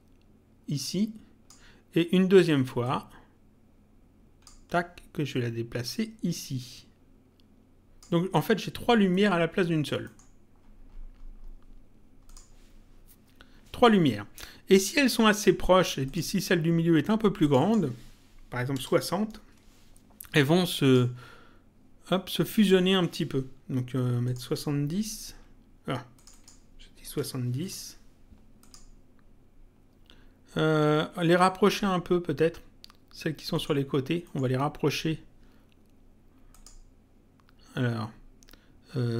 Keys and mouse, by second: 2.8 ctrl+click, 5.8 click, 9.1 middle click, 12.3 click, 16.1 click, 17.4 click, 19.4 Return, 20.8 click, 24.2 click, 26.2 click, 27.6 click, 33.6 middle click, 36.5 click.